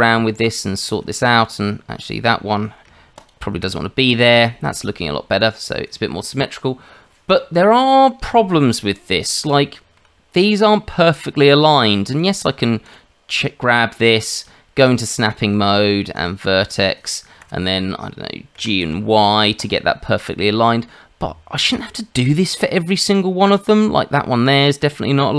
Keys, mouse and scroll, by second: 0.3 Tab, 3.1 ctrl+click, 9.2 scroll up 2, 9.6 shift+middle click, 12.1 click, 12.8 click, 14.8 click, 18.5 g, 21.1-21.5 scroll down 1, 21.7 shift+middle click, 21.9-24.2 scroll down 1, 24.3 click.